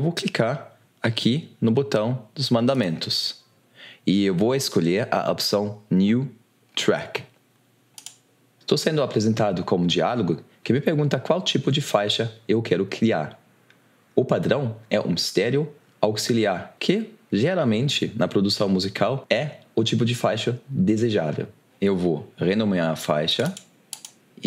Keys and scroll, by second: 24.3 shift+t.